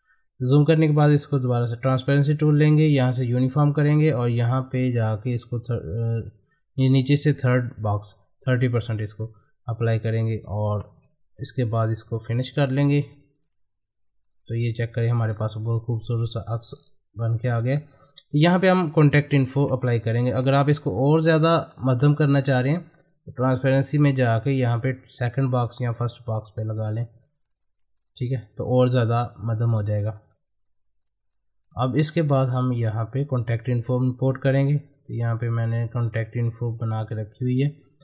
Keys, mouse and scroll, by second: 8.5 click, 10.4 click, 12.5 click, 15.3 scroll up 1, 17.2 click, 17.6 middle click, 19.8 click, 25.9 click, 27.6 ctrl+click, 28.3 middle click, 29.7-30.1 scroll down 1, 30.1 middle click, 30.6 click, 31.7 ctrl+click, 32.5 scroll up 1, 34.9-38.0 drag.